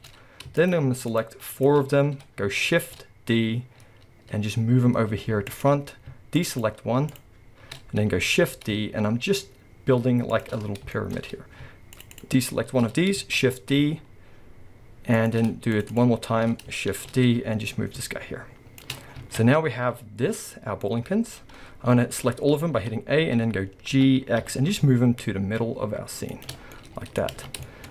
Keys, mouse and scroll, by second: 0.6 shift+click, 1.1 shift+click, 1.5 shift+click, 1.8-2.5 scroll up 1, 2.7 shift+d, 6.4 click, 6.5 shift+click, 7.1 shift+click, 8.3 shift+d, 10.9-12.1 shift+drag, 12.2 shift+click, 12.9 scroll up 1, 13.4 shift+d, 15.7 shift+click, 15.9 shift+click, 16.9 shift+d, 18.9 click, 19.3 alt+a, 19.4-22.1 middle drag, 22.1 a, 22.8 middle click, 22.8 KP_7, 23.9 g, 26.6 scroll, 26.7-27.9 middle drag, 27.3 alt+a.